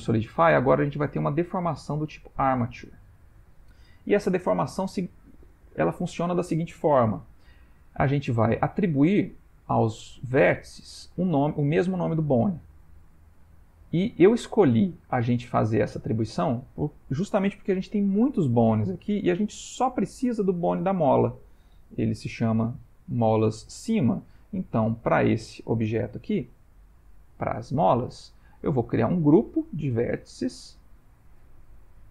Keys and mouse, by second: 0.3 middle click, 3.8 middle click, 5.4 ctrl+middle click, 9.7 middle click, 11.4 click, 13.6 ctrl+middle click, 14.2 middle click, 15.6 click, 19.2 ctrl+middle click, 19.9 click, 22.3 F2, 24.2 middle click, 24.8 click, 25.4 middle click, 27.0 g, 29.0 click.